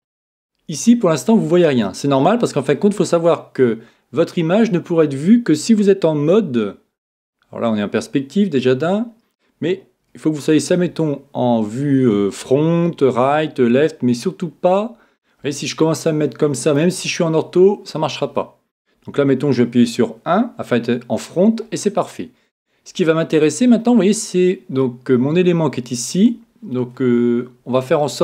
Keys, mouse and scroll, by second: 6.2 KP_5, 10.0 KP_1, 16.1-17.9 middle drag, 20.0 KP_1.